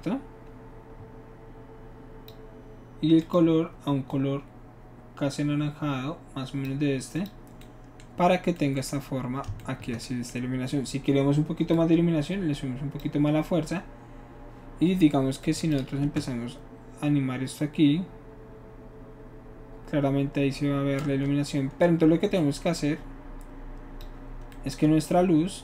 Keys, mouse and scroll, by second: 3.2 click, 4.1-6.7 drag, 7.1 click, 11.7-13.0 shift+drag, 15.4 drag, 16.2 space, 21.1 space, 22.4-24.0 drag.